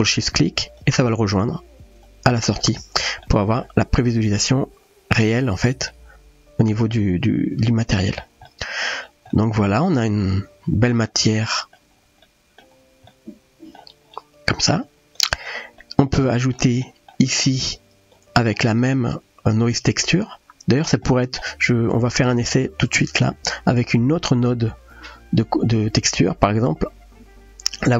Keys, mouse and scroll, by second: 2.0-2.5 drag, 3.3-3.6 middle drag, 4.8 middle click, 5.9-8.2 middle drag, 8.5-8.9 shift+middle drag, 9.4-10.9 middle drag, 11.4-11.8 shift+middle drag, 12.2-12.7 middle drag, 13.1-13.8 middle drag, 14.8 click, 15.8-16.2 middle drag, 16.8 middle click, 17.6-18.1 drag, 21.1 middle click, 21.9 click, 23.3 shift+a.